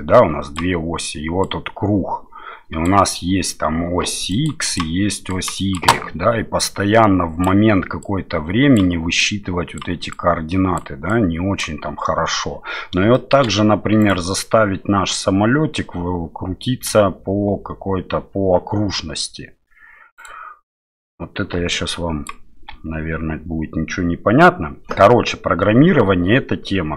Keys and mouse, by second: 4.3 click, 4.6 click, 5.3 click, 5.5 d, 5.5 click, 5.5-13.0 d, 6.6 click, 8.0 click, 9.2-10.8 drag, 11.1 click, 13.1 shift+middle click, 14.0 right click, 20.1 right click, 21.5-22.5 d, 21.7 click.